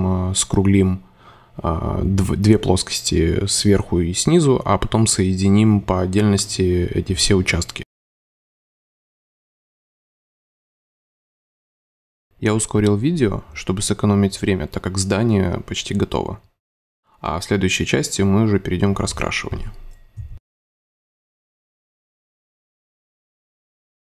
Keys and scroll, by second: 0.6 space, 0.9 super+z, 1.8 super+z, 3.1 space, 4.1 c, 5.2 a, 5.9 super+x, 5.9 super+c, 6.1 Delete, 6.3 super+f, 6.5 super+space, 7.3 alt+super+y, 7.7 space, 8.4 a, 9.0 super+Delete, 9.2 super+v, 9.3 c, 9.8 space, 11.0 c, 12.0 shift+super+z, 13.0 super+z, 13.6 super+space, 14.2 super+x, 14.4 super+space, 16.2 super+z, 17.2 super+z, 18.2 super+z, 19.4 shift+v, 19.6 super+z, 22.7 space.